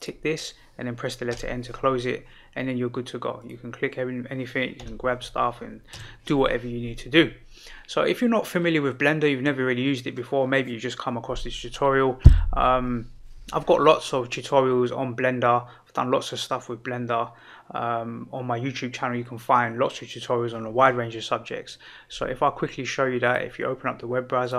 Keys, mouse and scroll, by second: 1.3 n, 3.3 click, 4.7 g.